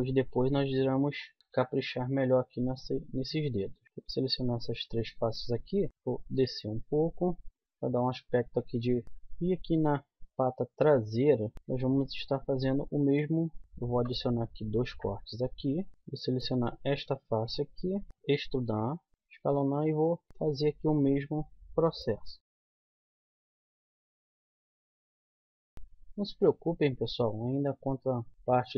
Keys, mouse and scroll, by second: 0.2 e, 1.4 g, 1.5 s, 3.3 click, 3.8 click, 5.8 KP_1, 5.9 z, 7.5 z, 9.0 KP_1, 9.3 z, 10.2-12.2 middle drag, 13.6 z, 13.9 ctrl+r, 16.7-18.1 middle drag, 18.1 z, 18.2 e, 19.1 g, 19.1 s, 19.5 click, 20.5 click, 22.4 e, 22.8 g, 23.2 click, 24.1 right click, 24.5-25.8 typing, 27.5 z, 28.3 z.